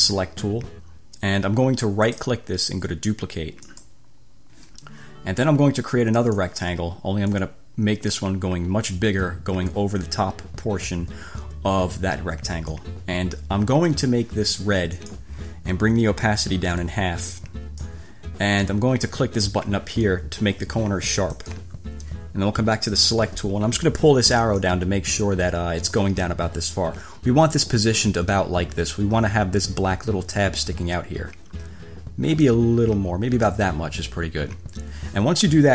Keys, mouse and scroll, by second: 0.0 click, 2.4 click, 3.8 click, 6.4 click, 7.6-13.2 drag, 15.2 click, 17.0 click, 21.5 click, 23.1 click, 24.8-26.3 drag, 32.6 click.